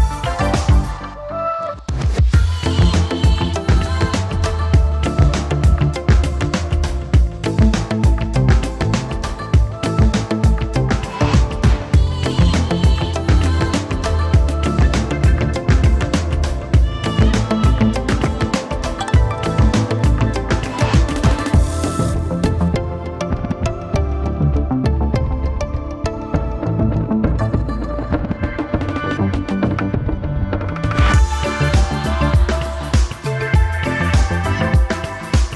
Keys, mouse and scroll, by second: 14.0 alt+click, 17.8 ctrl+v, 33.7 0.